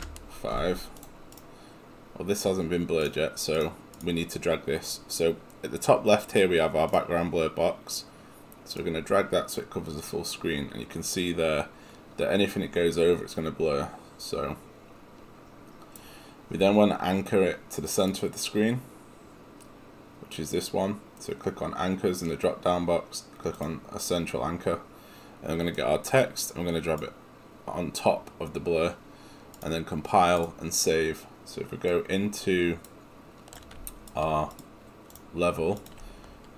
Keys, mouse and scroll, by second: 0.8 Return.